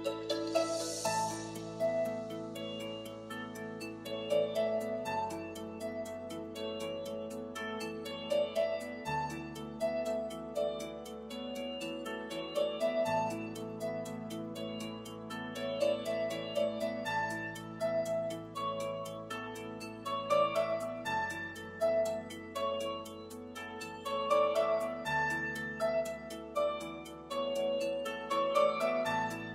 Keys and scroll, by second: 2.7 l, 9.0 super+s.